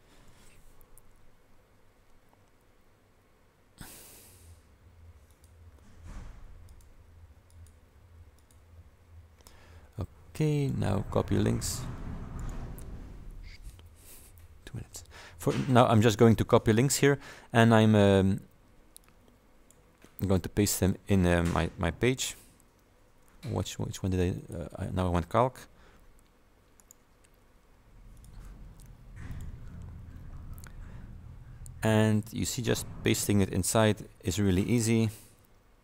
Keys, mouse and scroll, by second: 1.4 scroll down 2, 2.0-2.3 scroll up 2, 3.9 click, 5.4 click, 6.2 Down, 6.7 click, 7.1 Down, 7.6 click, 8.5 click, 10.7 click, 12.5 right click, 19.1 click, 20.9 click, 24.4 click, 26.9 right click, 28.2 click, 29.4 click, 31.9-33.3 scroll down 2, 33.3-34.5 scroll down 1, 34.5 scroll down 1.